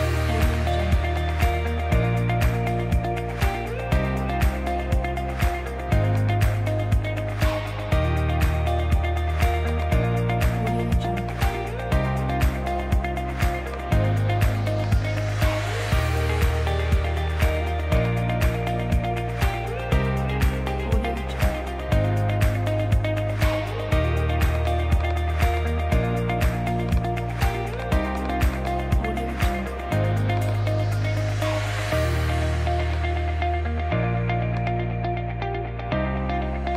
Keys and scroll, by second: 8.2 super+z, 23.3 super+z.